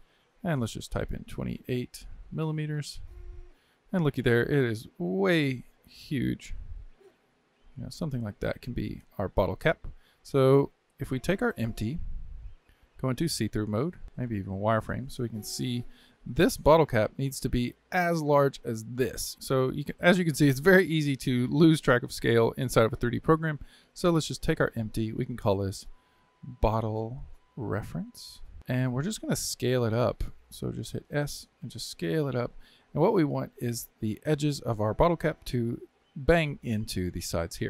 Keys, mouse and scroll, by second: 0.8-3.5 drag, 3.5-4.1 scroll down 10, 5.7 s, 11.3 click, 13.2 alt+z, 14.0 z, 14.9 scroll up 2, 15.5-17.2 shift+middle drag, 17.2 scroll down 1, 19.1 scroll down 3, 19.3 scroll up 10, 24.3 click, 25.2-26.7 drag, 26.7 t, 28.7 click, 31.2 s, 32.9-35.1 scroll down 2.